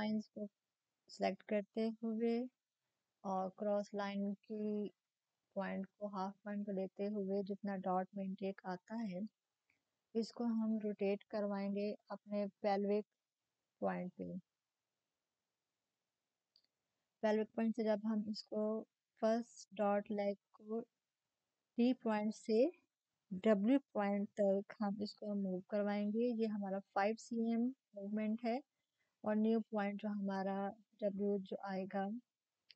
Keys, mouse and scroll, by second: 1.9 shift+click, 8.0 shift+click, 8.1 shift+click, 15.2 click, 18.8 click, 22.2-29.3 drag, 30.5-32.7 drag.